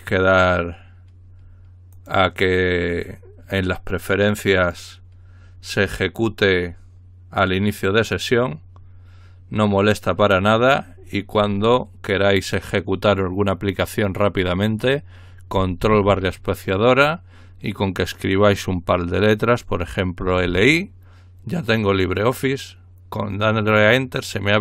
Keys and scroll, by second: 20.0-21.0 typing.